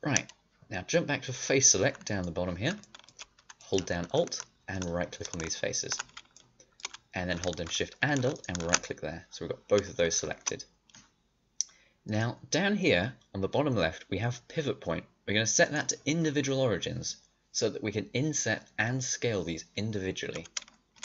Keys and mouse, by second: 2.0-4.7 middle drag, 6.5 middle click, 8.3 click, 8.8-10.2 middle drag, 20.3 middle click.